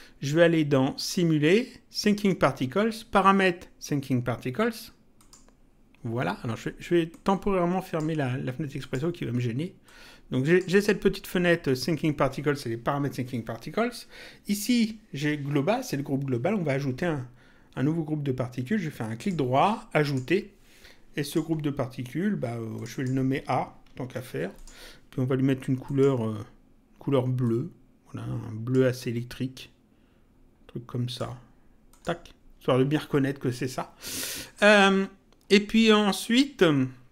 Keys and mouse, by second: 1.0 click, 5.2 click, 7.0 click, 8.7 click, 19.2 right click, 21.2 click, 22.7 click, 24.1 shift+a, 24.5 click, 25.8 click, 27.4 click, 28.9 click, 31.9 click, 34.4 click.